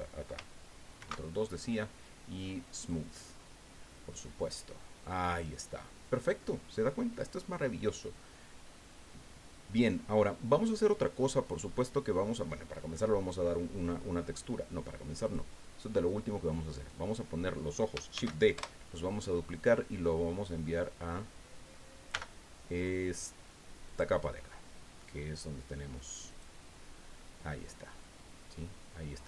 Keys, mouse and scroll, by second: 1.0 ctrl+2, 2.8 click, 3.4 scroll down 2, 3.9-6.3 drag, 6.4 scroll up 2, 15.2 click, 15.8-16.3 scroll down 1, 16.7 right click, 18.1 shift+d, 18.5 shift+Return, 22.1 m, 23.8 click, 26.3 click, 28.0-29.2 drag.